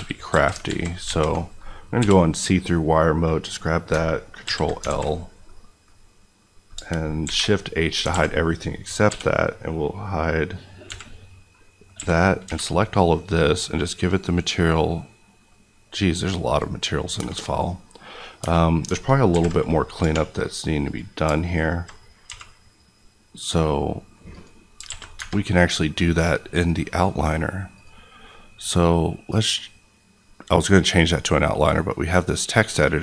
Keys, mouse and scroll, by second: 0.6 alt+z, 1.9 b, 2.4 click, 3.4 middle click, 4.4 ctrl+l, 4.8 alt+z, 5.4 middle click, 5.8 scroll up 1, 6.4 middle click, 7.2 shift+h, 7.6-8.1 scroll down 2, 8.1 alt+a, 9.0 l, 10.8 h, 11.4 middle click, 11.9-12.4 typing, 16.5 click, 17.1 Tab, 17.4 middle click, 18.3 Tab, 19.3 alt+h, 20.0 3, 20.8 click, 22.2 q, 24.3 click, 24.8 alt+a, 25.1 Tab, 25.4 middle click, 27.7 click.